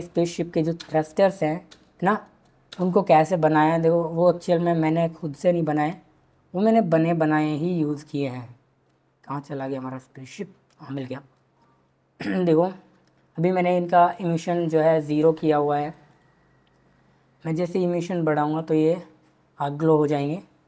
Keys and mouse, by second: 0.7 space, 2.7 space, 11.0-11.6 shift+middle drag, 14.2 click, 16.1 click, 17.5-18.7 drag.